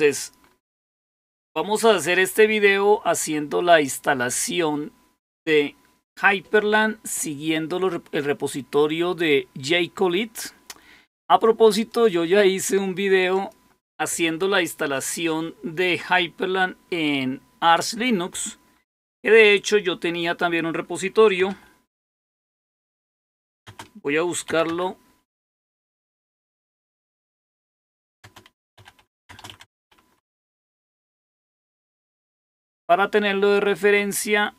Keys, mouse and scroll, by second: 0.3-1.0 scroll up 2, 1.0-3.3 scroll up 1, 3.3-3.8 scroll up 1, 3.8-9.2 scroll up 1, 9.2-11.8 scroll up 1, 11.8 click, 12.2 click, 13.3 click, 21.1-31.2 typing, 33.3-34.0 scroll down 1, 34.0 typing.